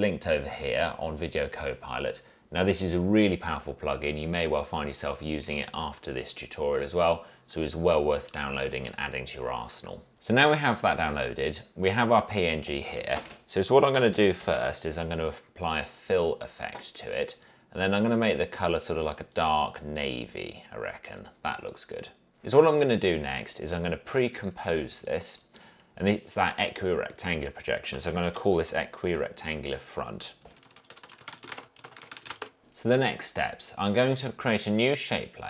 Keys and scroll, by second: 13.3 ctrl+space, 13.8-15.2 typing, 28.0-32.8 typing.